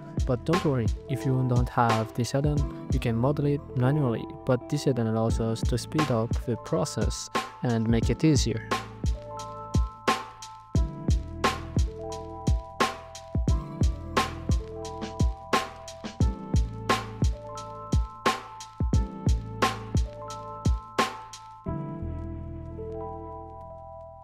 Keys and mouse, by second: 0.5 alt+z, 3.4 click, 4.8 shift+click, 8.2-10.4 shift+drag, 12.3 shift+click, 13.8 click, 14.2 click, 15.9 g, 16.3 y, 20.2-21.6 shift+drag, 23.2 click.